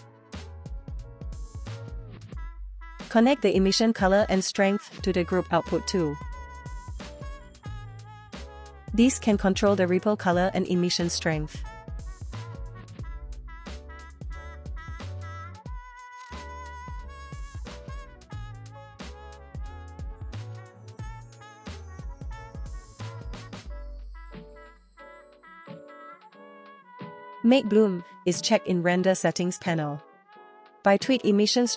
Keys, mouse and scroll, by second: 3.1-4.8 drag, 5.9-6.4 drag, 6.8 click, 7.3 scroll down 2, 7.8 click, 8.6-12.5 drag, 11.3 BackSpace, 11.4 BackSpace, 12.3 p, 13.0-14.2 drag, 14.0 s, 16.2 middle click, 18.7 click, 19.3 middle click, 19.6 click, 19.8 click, 20.5 shift+middle click, 21.4 space, 21.9 space, 22.8 click, 23.6 middle click, 24.5 click, 25.9 click, 26.4 middle click, 27.3 click, 28.6 click, 30.1-31.7 drag.